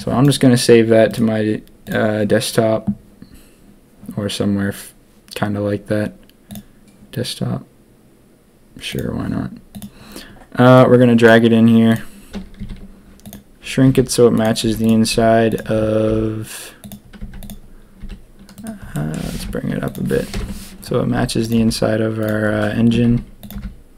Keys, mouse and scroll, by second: 11.9 click, 12.5 s, 13.8 g, 14.6 z, 15.1 s, 16.0 g, 17.2 z, 18.0 s, 18.9 click, 19.2 g, 20.3 ctrl+KP_1, 21.1 s, 21.5 g, 23.0 s, 23.5 g.